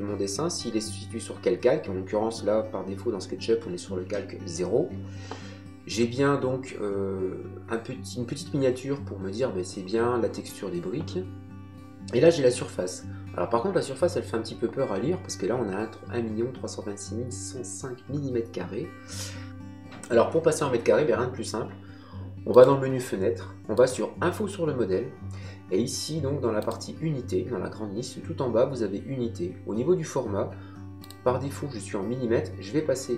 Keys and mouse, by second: 22.5 click, 26.6 click, 31.0 click.